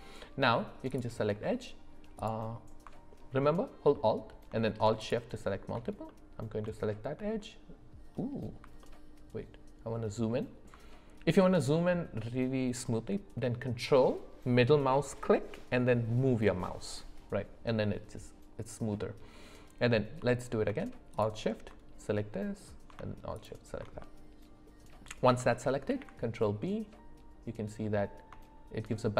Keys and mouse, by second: 0.9 click, 6.1 middle click, 6.8 shift+middle click, 8.8-10.6 ctrl+middle drag, 21.1 alt+shift+click, 22.1 middle click, 24.0-25.0 middle drag, 25.9 ctrl+b.